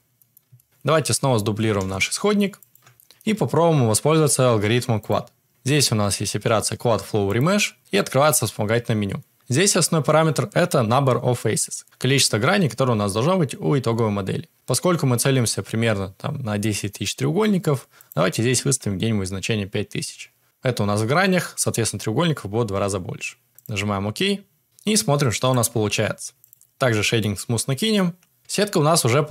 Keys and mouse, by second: 0.1 middle click, 0.5 shift+middle click, 1.7 shift+d, 5.0 click, 7.3-24.6 drag, 18.9 0, 19.0 0, 25.6-26.5 drag, 27.1-27.8 middle drag, 28.4 Tab.